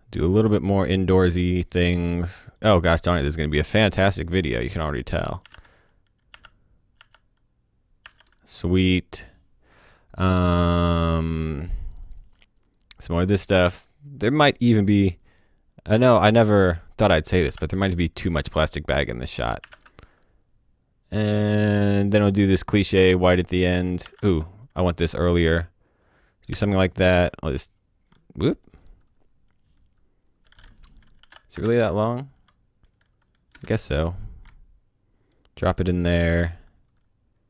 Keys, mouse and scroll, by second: 0.8-1.6 scroll up 1, 1.6 click, 3.7 click, 5.4 i, 5.5 space, 6.3 i, 8.0 typing, 8.4 click, 9.5 scroll, 9.6-10.8 scroll down 1, 11.9 click, 17.5 space, 19.6 o, 19.7 space, 19.8 click, 24.2 space, 26.5 o, 26.6 click, 31.1 shift+i, 31.5 space, 33.5 space, 33.6 click, 35.6 click, 36.1 click.